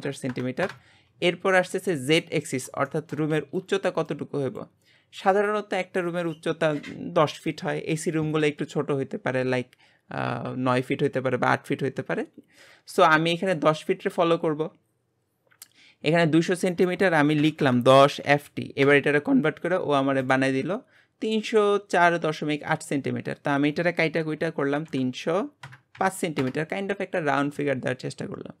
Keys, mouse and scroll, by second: 2.9-12.7 shift+middle drag, 14.0 click, 20.2 click, 28.2-28.6 scroll down 2.